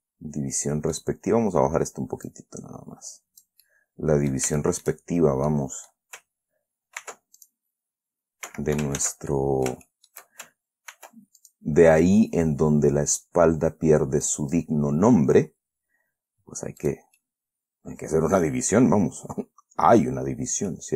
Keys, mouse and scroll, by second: 2.6-4.0 drag, 4.0 middle click, 4.9 shift+middle click, 5.4-5.7 shift+scroll up 2, 5.8 middle click, 7.4 ctrl+r, 7.7 ctrl+click, 8.8 Escape, 9.3 ctrl+z, 9.7 ctrl+click, 10.3 shift+scroll down 2, 11.3 ctrl+r, 11.7 ctrl+click, 14.6 click, 17.2 right click, 17.5-19.3 middle drag.